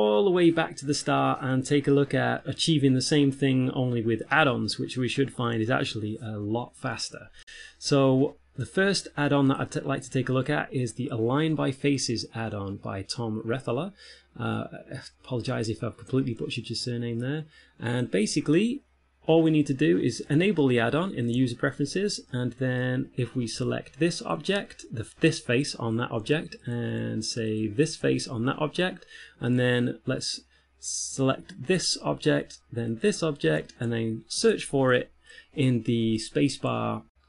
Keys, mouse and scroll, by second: 0.0-1.6 typing, 0.0 shift+middle click, 0.0 click, 0.2 middle click, 0.6 middle click, 0.9 click, 1.1 click, 1.3 shift+middle click, 1.4 middle click, 1.6 ctrl+a, 1.6 right click, 2.0 alt+r, 2.0 right click, 2.3 right click, 2.3 click, 2.5 click, 2.5 scroll down 3, 2.8 Tab, 2.9 middle click, 2.9-3.6 scroll up 3, 3.2 shift+middle click, 3.6 ctrl+a, 3.9 alt+p, 4.3 click, 4.6 ctrl+p, 4.7 shift+right click, 5.0 click, 5.4 g, 5.4 F6, 6.0 click, 6.5 Tab, 6.5 right click, 6.8 ctrl+space, 7.0 click, 21.0 shift+middle click, 21.8 ctrl+middle click, 22.6 middle click, 23.8 Tab, 24.4 right click, 26.6 Tab, 27.1 right click, 27.2 Tab, 27.8 right click, 28.3 Tab, 29.8 right click, 31.5 right click, 33.3 shift+right click, 34.7 space.